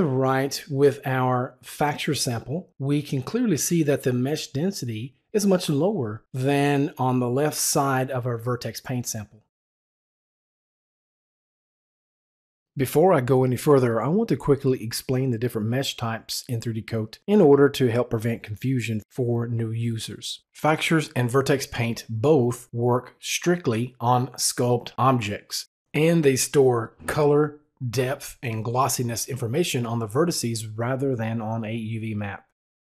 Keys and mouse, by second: 11.5 click.